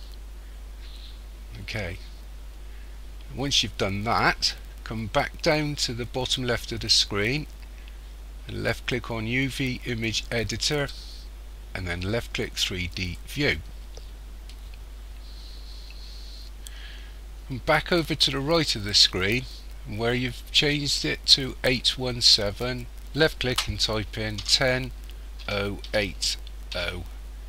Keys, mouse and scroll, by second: 13.1 click, 22.7 click.